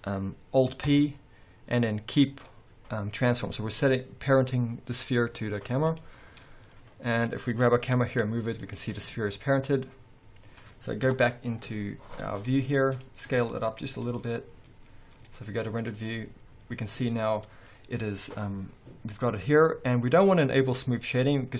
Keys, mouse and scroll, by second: 1.0 ctrl+p, 7.6 click, 7.8-12.9 middle drag, 8.0 g, 8.9 right click, 11.2 KP_0, 11.9 scroll up 1, 13.0 click, 13.5 s, 14.2 click, 14.9 scroll down 1, 15.3 z, 17.0-20.5 scroll up 2, 20.5-21.5 drag.